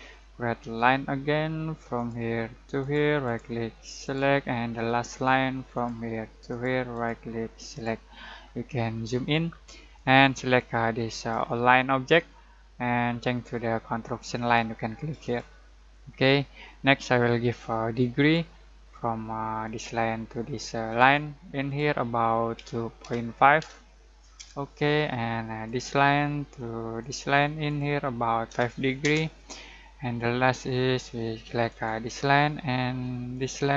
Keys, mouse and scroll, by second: 0.6 l, 1.9 click, 3.2 right click, 4.0 click, 4.7 click, 6.9 right click, 7.7 click, 8.3-9.4 scroll down 1, 9.9-14.3 drag, 15.2 click, 18.1 click, 22.5 2, 23.6 typing, 24.3 Return, 25.6 click, 28.4 typing, 29.0 Return, 31.7 click.